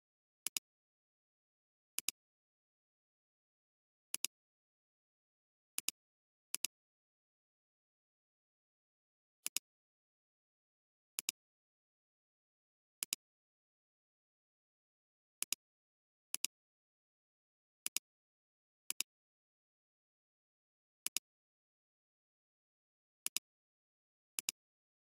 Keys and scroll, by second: 0.4 alt+space, 9.4 alt+space, 10.0 alt+space, 11.1 alt+space, 15.5 space, 17.8 alt+space.